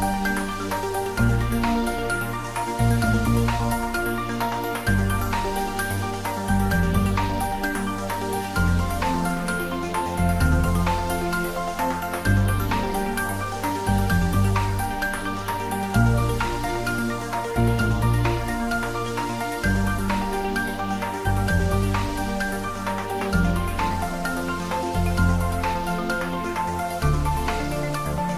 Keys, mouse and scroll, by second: 3.9 click, 5.0 Tab, 7.1 Tab, 9.1-10.6 scroll down 1, 10.6 Tab, 12.5-19.6 middle drag, 24.4 click.